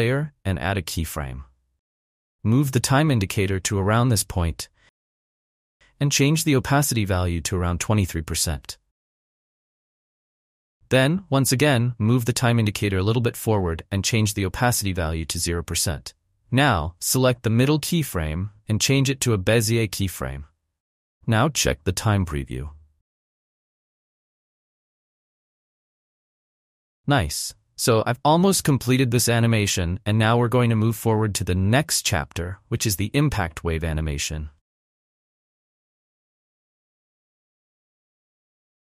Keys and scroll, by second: 9.4 2, 9.6 3, 10.1 Return, 15.7 Return, 23.6 space, 26.9 space.